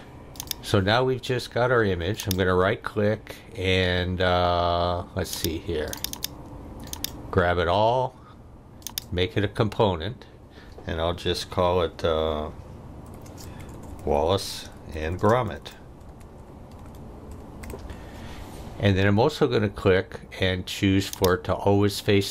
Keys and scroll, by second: 12.8-17.6 typing.